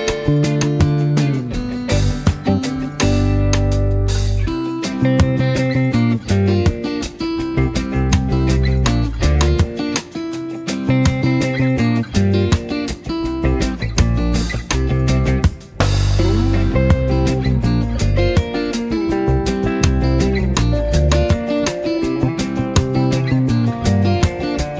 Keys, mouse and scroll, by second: 0.3 v, 0.8 click, 2.5 Down, 4.6 click, 4.8-7.1 typing, 5.0 click, 5.3 click, 5.7 click, 6.5 click, 7.3-7.9 drag, 9.1 space, 9.2 click, 9.5 z, 9.8 click, 10.5 space, 10.9 v, 11.3-11.9 drag, 14.0 shift+Up, 16.3 click, 16.5 space, 16.7 click, 17.1 space, 17.7 click, 18.9 shift+Up, 19.9 click, 20.0-22.5 typing, 20.3 click, 20.9 click, 21.3-22.4 click, 22.8-23.4 drag, 24.7 space.